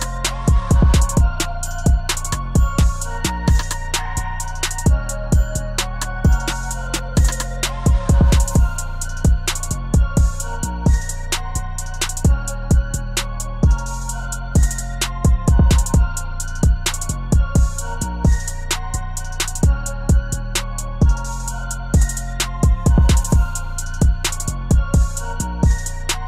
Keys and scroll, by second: 9.6 ctrl+z.